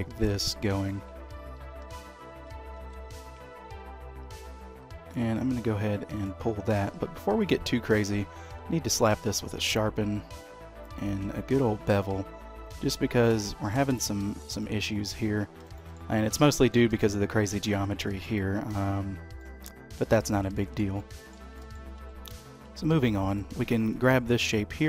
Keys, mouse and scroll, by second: 0.2 click, 0.9 alt+click, 1.8 g, 6.7 Tab, 7.4 click, 8.4 q, 10.1 q, 13.7 middle click, 14.6 shift+middle click, 15.4 scroll down 2, 15.7 shift+middle click, 16.1 middle click, 16.9 shift+middle click, 18.0 shift+middle click, 18.8-19.2 scroll up 1, 19.3 middle click, 20.2-20.5 scroll up 2, 20.5 shift+middle click, 21.0 middle click, 21.5 shift+middle click, 21.9 Tab, 22.6 Tab, 23.2 click, 23.9 click, 24.5 Tab.